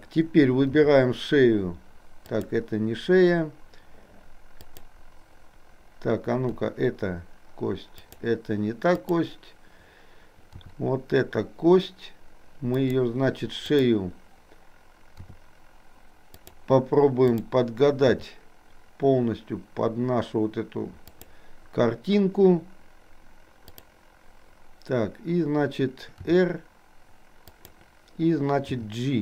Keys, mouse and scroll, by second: 0.9 r, 4.7 click, 6.6 r, 9.0 click, 10.6 r, 13.7 click, 15.4 r, 17.4 click, 18.2 r, 26.4 r, 28.9 g.